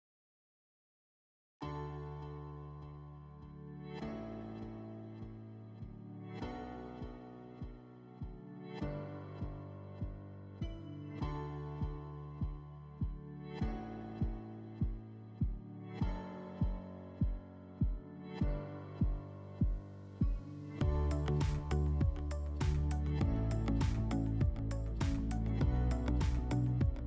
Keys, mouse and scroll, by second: 10.0-12.0 drag, 16.0 click, 17.5 click, 18.4-20.4 drag, 22.5-24.6 drag, 24.8-26.9 drag.